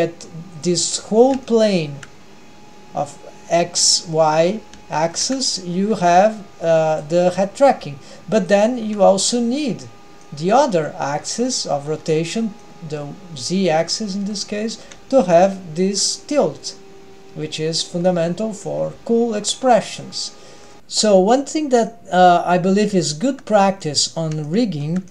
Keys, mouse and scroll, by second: 0.9-1.4 scroll up 3, 1.4-2.1 shift+middle drag, 4.4-4.8 scroll down 2, 4.9 shift+middle click, 5.8 g, 7.2 scroll down 1, 7.3-7.7 middle drag, 8.8-9.4 scroll down 1, 8.8 g, 9.4-10.0 scroll up 2, 9.8 middle drag, 10.3 middle click, 12.6-13.2 middle drag, 13.8-14.6 middle drag, 14.8 middle click, 15.3 r, 18.3-18.8 middle drag, 18.9 g, 20.2-20.8 middle drag, 20.8 ctrl+alt+shift+super+r, 20.8-21.2 scroll down 1, 21.8 scroll up 1, 23.0 Tab, 23.7 scroll up 1, 23.8-25.0 middle drag.